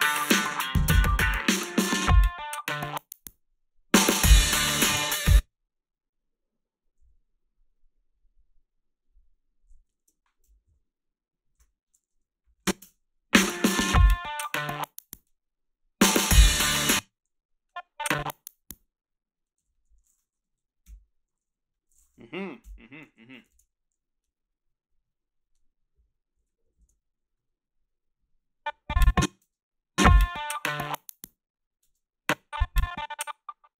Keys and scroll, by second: 5.1 space, 7.0 t, 10.7 shift+., 12.5 a, 12.8 space, 16.7 space, 17.1 a, 19.6 g, 20.9 Delete, 22.6 Delete, 27.7 ctrl+b, 29.4 space, 31.9 space.